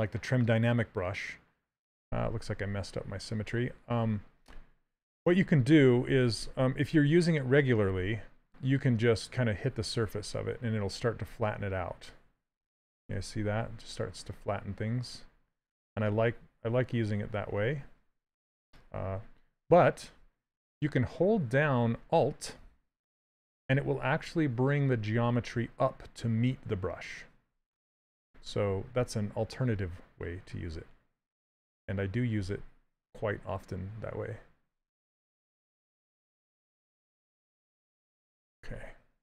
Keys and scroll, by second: 5.1 s, 13.2 shift+f, 28.1 ctrl+z, 38.7 s.